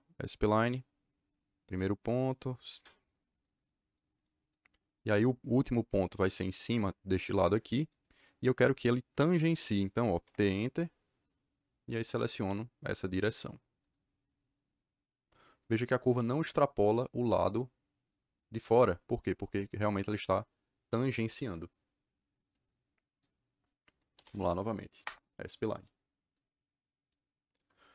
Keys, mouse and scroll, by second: 0.0-0.2 typing, 1.6 click, 2.2 click, 2.6 click, 2.9 click, 3.2 click, 3.5 click, 3.8 click, 4.1 click, 4.3 click, 7.7 click, 10.2 t, 10.3 Return, 13.8 click, 23.9-24.7 typing, 25.0 Return.